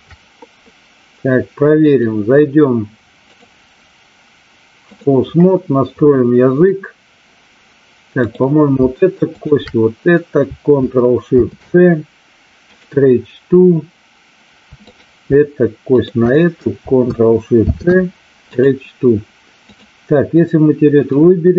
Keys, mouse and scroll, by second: 1.9 click, 3.3-4.9 drag, 8.2-8.6 drag, 9.3 shift+click, 14.9 click, 15.9 shift+click, 17.6 ctrl+shift+c, 19.7 click, 21.0-21.5 drag.